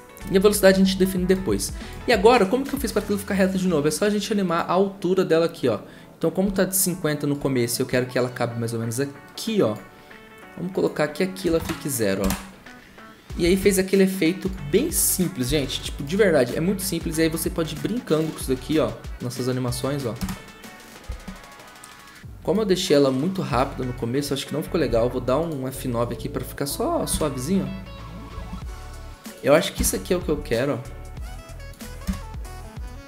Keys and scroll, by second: 6.4 u, 11.5-12.2 typing, 11.6 Return, 13.4 F9, 20.2 0, 24.8 F9, 27.1 0, 28.3 ctrl+z.